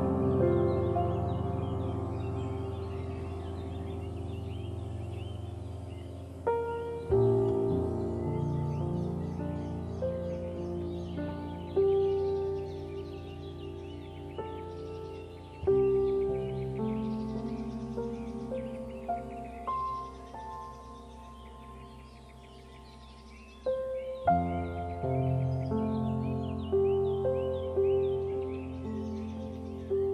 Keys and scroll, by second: 1.5 ctrl+0, 22.0 ctrl+g.